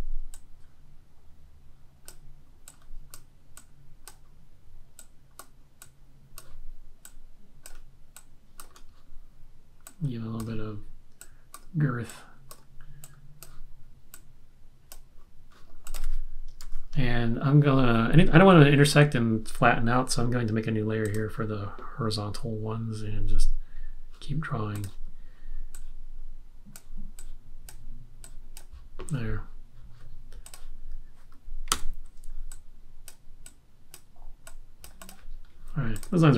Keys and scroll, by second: 16.7 super+-, 31.7 v.